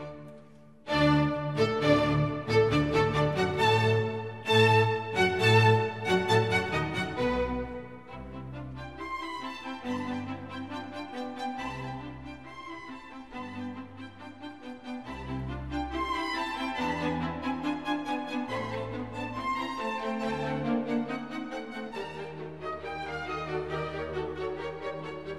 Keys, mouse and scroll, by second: 1.2 Down, 1.4 Down, 2.7 Down, 3.3 ctrl+j, 12.9 Delete, 14.8 Delete, 15.0 ctrl+d, 20.1 double click.